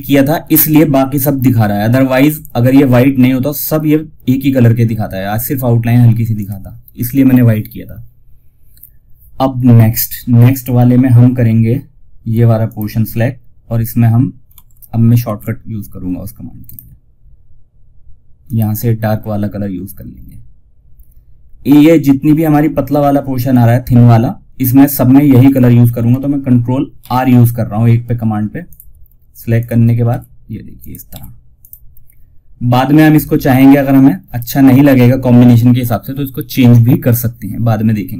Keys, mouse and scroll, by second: 5.7 click, 12.0 click, 14.5 ctrl+alt+shift+s, 15.9 click, 24.7 click, 26.3 ctrl+r, 27.9 click, 29.3 r, 30.1 click, 30.4 ctrl+r, 30.9 click.